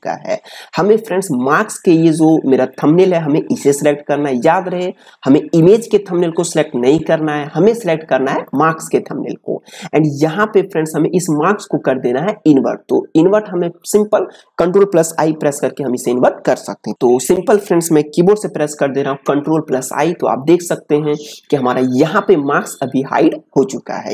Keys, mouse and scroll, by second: 2.7 click, 5.5 click, 8.4 click.